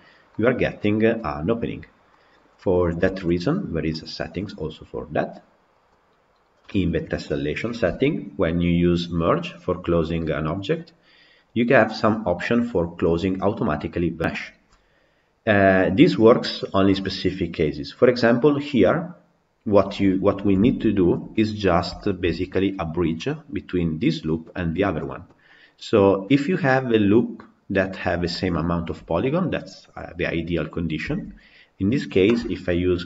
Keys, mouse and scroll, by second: 2.7 click, 2.9-14.1 shift+middle drag, 14.6-20.7 middle drag, 20.7 Tab, 21.0 scroll down 1, 21.2-21.9 scroll up 3, 21.9-31.0 shift+middle drag, 31.0 Tab.